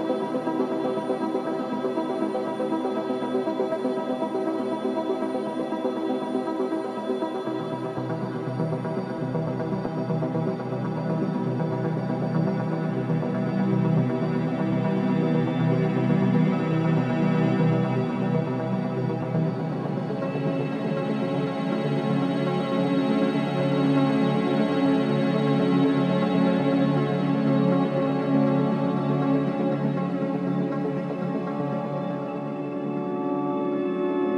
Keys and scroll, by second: 0.0 2, 0.1 Return, 0.9 0, 1.1 Return, 1.5 0, 1.7 Return, 2.2 ., 2.3 Return, 7.1 -, 7.2 0, 7.3 2, 8.6-10.3 typing, 10.5 Return, 26.7 /, 29.0 F9, 30.3 3.